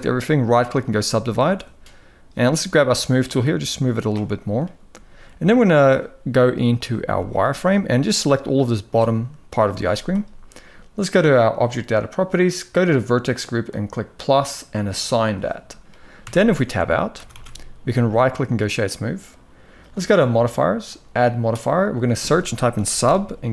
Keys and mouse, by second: 0.5-2.1 right drag, 2.7-3.8 drag, 6.4 click, 6.7 z, 7.5-8.6 drag, 9.5 z, 13.3 click, 14.6 click, 14.9 click, 15.9 Tab, 16.9 ctrl+s, 20.6-23.5 drag.